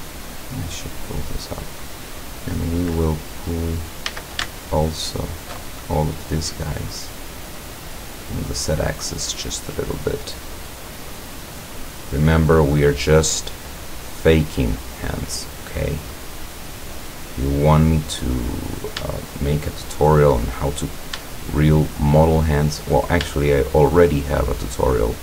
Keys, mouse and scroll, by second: 2.4-3.3 middle drag, 3.5-3.8 scroll up 1, 4.1 a, 5.1 alt+shift+right click, 5.8 alt+shift+middle click, 6.4-6.9 middle drag, 7.7-9.0 drag, 9.3-11.5 drag, 11.6 click, 13.5-14.7 drag, 15.1-15.5 scroll up 1, 15.5 middle click, 16.1 middle click, 17.1 click, 17.5 middle click, 18.1 middle click, 18.7 right click, 19.3 shift+right click, 19.7 shift+right click, 20.3 shift+right click, 20.6-21.1 shift+scroll up 1, 21.9 shift+right click, 22.8 shift+right click, 23.4 shift+right click.